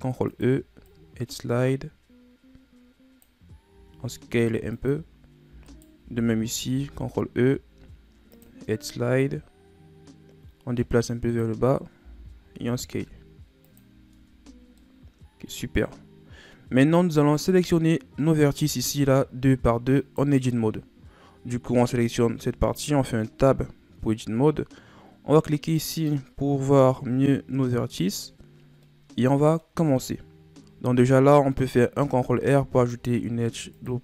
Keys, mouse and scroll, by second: 3.7 s, 5.7 alt+right click, 6.7 ctrl+e, 12.0 s, 14.1 Tab, 14.5-14.8 scroll down 3, 14.8-17.8 middle drag, 17.9-19.5 scroll up 1, 19.5-20.0 scroll up 1, 20.0 right click, 22.5 Tab, 23.4-25.9 middle drag, 25.9 click, 26.9-28.8 scroll up 1, 28.8-31.9 middle drag, 31.9 ctrl+r.